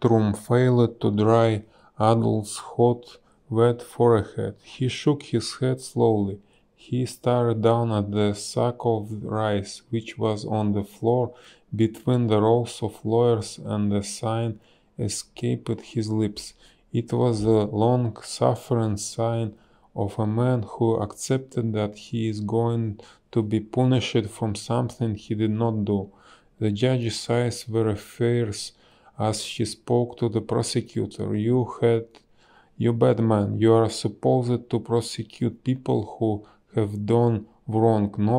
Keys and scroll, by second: 2.1 space, 8.2 space, 10.0 a, 11.4 space, 12.7 space, 20.7 space, 21.8 b, 23.3 space, 30.8 a, 33.4 space.